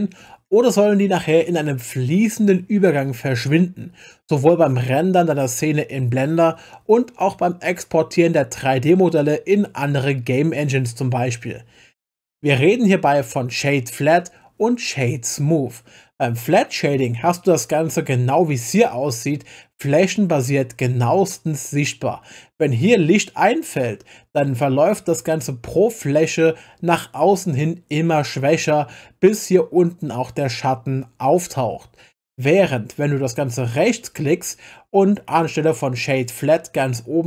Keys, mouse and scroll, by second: 33.8-37.2 right drag.